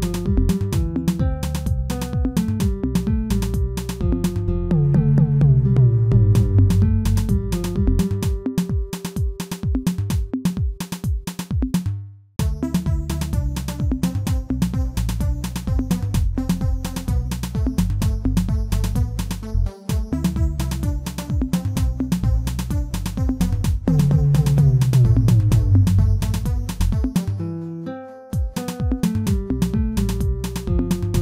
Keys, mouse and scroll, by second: 0.9 e, 4.3 g, 5.9 e, 11.6-12.6 shift+middle drag, 12.6 e, 25.4-27.1 shift+middle drag, 27.1 ctrl+r, 29.7 alt+click, 30.1-31.2 shift+middle drag.